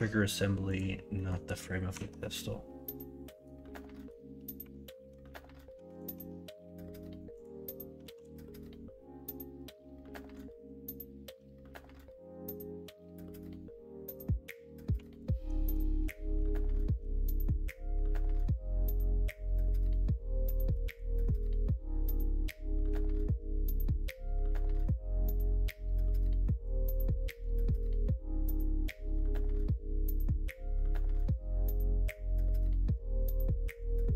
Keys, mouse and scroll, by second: 1.1 middle click, 1.9 Tab, 3.3 middle click, 3.9 middle click, 4.5 1, 8.0 KP_1, 8.2 KP_3, 11.0-14.1 drag, 15.9 2, 19.9 s, 26.0 ;, 29.0 ctrl+z, 32.8 1.